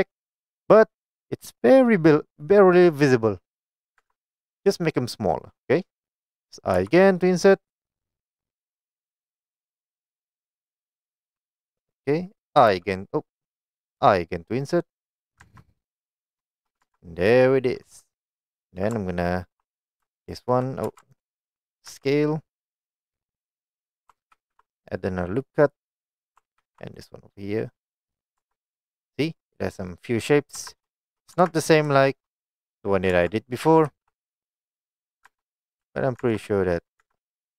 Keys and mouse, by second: 4.1 Tab, 6.9 i, 7.8 i, 9.9 click, 12.8 u, 14.2 i, 15.3 click, 15.5 Tab, 15.7 middle click, 16.7 shift+middle click, 16.9 Tab, 20.3 alt+click, 20.9 2, 21.2 alt+click, 22.0 s, 23.8 click, 24.4 ctrl+r, 26.2 click, 26.7 ctrl+r, 28.2 click, 28.5 Tab, 28.9-30.0 middle drag, 30.7 Tab, 31.0 shift+middle click, 31.4 Tab, 32.1 shift+middle drag, 33.2 Tab, 33.9 ctrl+r, 35.2 click, 35.3 Tab, 35.9 s, 36.3 Tab, 36.5 right click, 37.1 Tab.